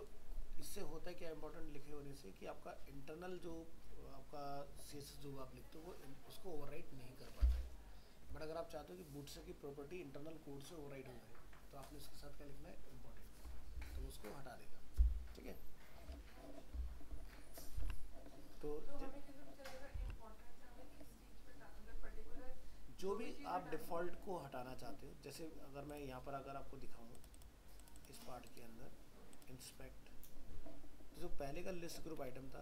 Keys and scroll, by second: 17.8 alt+Tab.